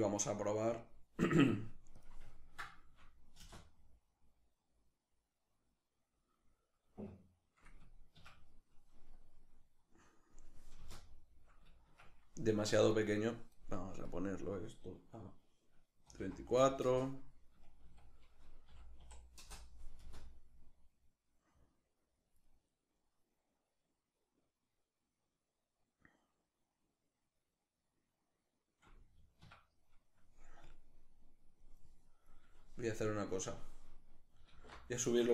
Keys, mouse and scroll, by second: 0.1-1.6 middle drag, 1.6-2.0 drag, 2.0-4.8 ctrl+middle drag, 3.0 space, 7.8 Escape, 8.8-19.6 drag, 10.4 space, 11.5 Escape, 16.6 Return, 19.1 Return, 19.6 space, 21.7-22.3 drag, 22.3 middle click, 25.9 middle click, 29.1 Escape, 30.3-33.1 drag, 34.1 alt+q, 34.7-35.3 ctrl+shift+middle drag.